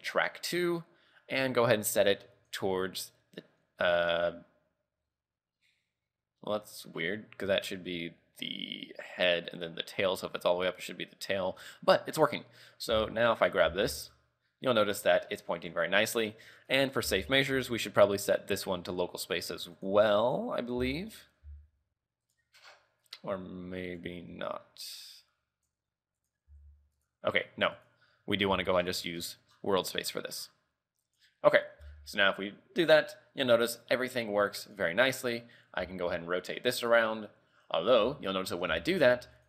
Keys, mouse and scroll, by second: 1.8 click, 13.1 a, 13.5 right click, 13.7 z, 14.0 r, 16.9 right click, 17.2 z, 17.9 click, 19.9 click, 20.9 z, 21.3 right click, 21.6 r, 23.2 right click, 24.2 click, 26.4 right click, 26.6 r, 28.0 right click, 29.0-30.2 alt+scroll down 12, 29.9 alt+scroll up 1, 30.2-31.3 alt+scroll down 5, 31.3 right click, 31.6 scroll down 3, 31.9 r, 35.3 right click, 35.6-35.9 scroll down 1, 35.9 r, 38.9 shift+middle click, 39.2 r.